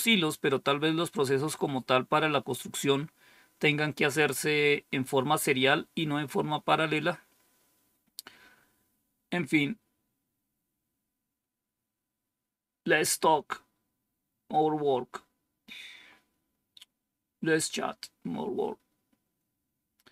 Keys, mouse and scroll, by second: 7.5-8.8 scroll down 2, 8.8 scroll down 1.